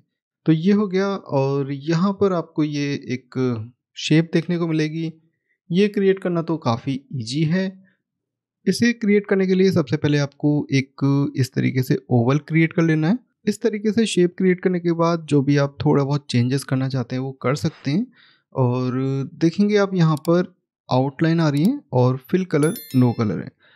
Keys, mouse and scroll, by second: 0.0 scroll up 1, 6.0 middle click, 10.1 click, 15.0 click, 18.9-19.4 scroll up 1.